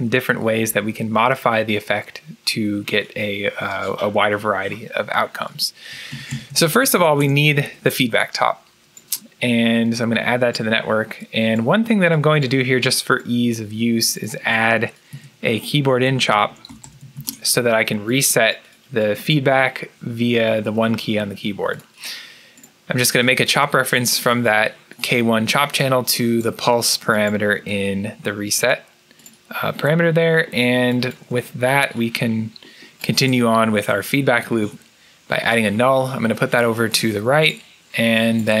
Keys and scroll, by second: 5.5-7.5 typing, 15.0 Tab, 15.7-17.6 typing, 20.2-21.0 typing, 34.3 alt+n.